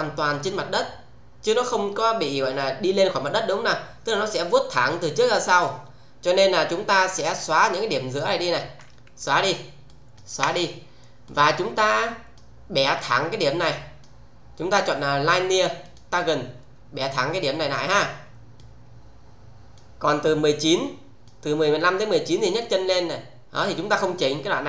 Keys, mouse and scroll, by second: 7.1-8.4 click, 9.2 Delete, 9.9 click, 10.2 Delete, 11.2-12.4 click, 15.7 click, 18.6-19.7 click, 20.8-21.4 click.